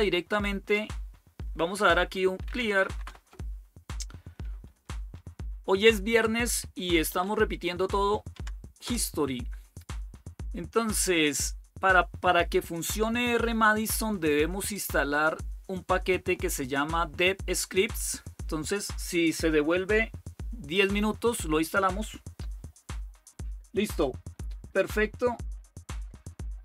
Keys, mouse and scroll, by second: 2.0-3.3 typing, 5.4 ctrl++, 6.5-7.9 typing, 8.1 Tab, 8.6 Return, 10.4-11.7 typing, 14.5-16.2 drag.